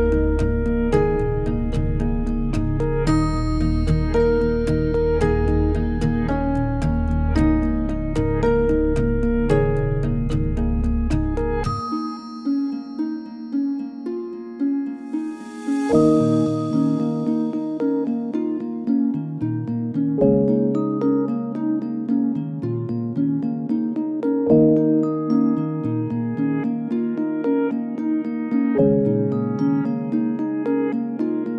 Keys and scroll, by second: 0.0-0.3 typing, 2.5 e, 19.0 b.